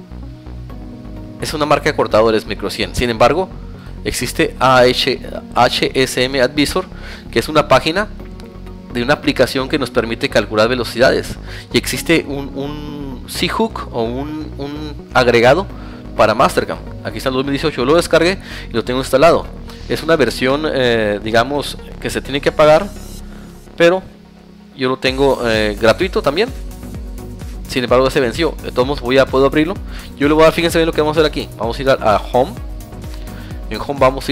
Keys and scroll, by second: 16.9 Tab, 18.2 Tab, 19.0 Tab, 26.2 Tab, 27.1 alt+Tab.